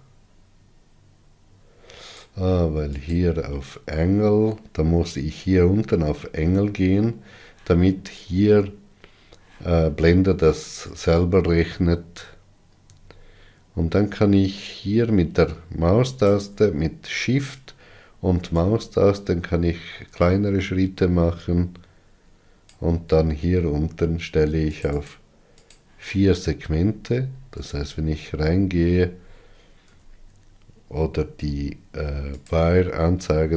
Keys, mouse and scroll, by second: 19.4-22.6 shift+drag, 25.5-27.3 drag, 27.3-28.2 scroll up 5, 28.2 Tab, 29.0-30.6 scroll up 4, 30.6 Tab, 33.1 q.